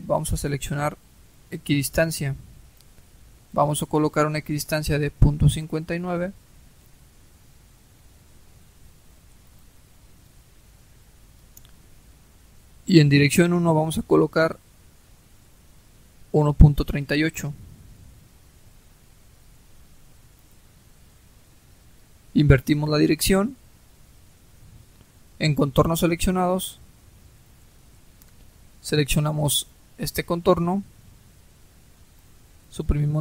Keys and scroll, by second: 6.9-7.9 typing, 16.7-18.3 typing, 33.1 Delete.